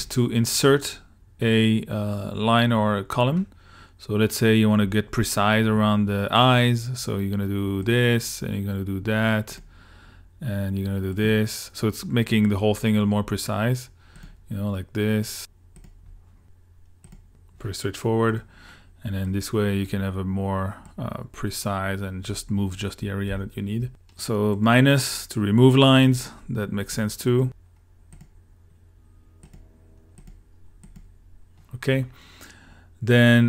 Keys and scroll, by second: 23.3 super+z.